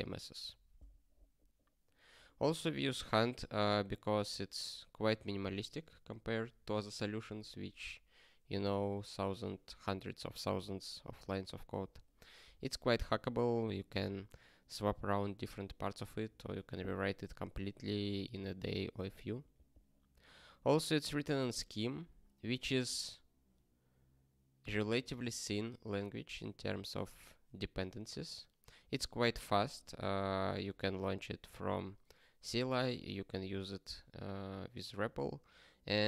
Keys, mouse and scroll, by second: 11.6 s, 12.4 BackSpace, 13.1 ctrl+s.